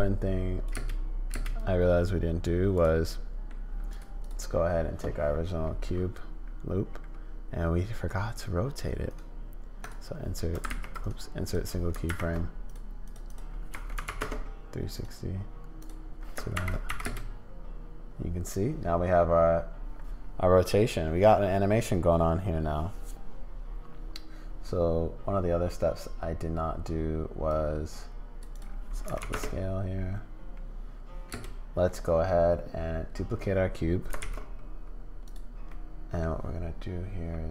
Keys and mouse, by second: 0.8 space, 1.3 space, 1.6 click, 3.1 click, 3.9 click, 4.2 click, 9.2 click, 10.7 ctrl+z, 11.0 click, 12.1 shift+Right, 12.8 click, 13.3-15.9 drag, 16.5 shift+Left, 17.0 space, 27.5 click, 28.5-29.8 drag, 31.3 space, 34.2 shift+d, 35.7 click.